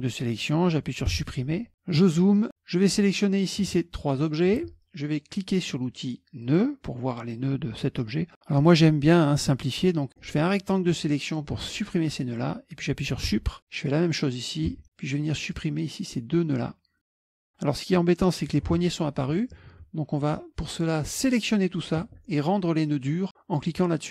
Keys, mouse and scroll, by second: 1.2 Delete, 2.0-2.5 scroll down 1, 2.9 click, 3.7 shift+click, 6.5 click, 9.7 middle click, 9.7 scroll up 1, 10.2-11.6 drag, 13.4 Delete, 13.6-14.8 drag, 14.8 Delete, 15.6-17.2 drag, 17.3 Delete, 18.4-19.5 drag, 19.8 ctrl+z, 21.2 click, 24.0 click.